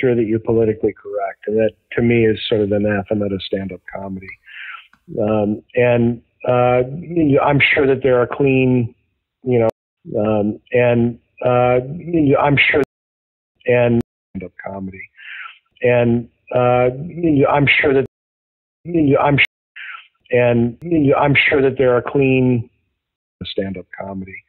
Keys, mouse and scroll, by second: 1.4 click, 2.3 click, 3.1-5.2 drag, 6.1 click, 9.6 space, 9.8 click, 9.9 space, 10.4-12.7 drag, 12.7 space, 13.2 ctrl+shift+Delete, 13.5 space, 13.9 space, 14.2 click, 14.2 space, 16.9-18.0 drag, 18.0 space, 18.5 ctrl+shift+Delete, 18.8 space, 19.3 space, 19.6 click, 19.6 space, 21.8 click, 22.2 click, 23.0 space, 23.2 click, 23.3 space.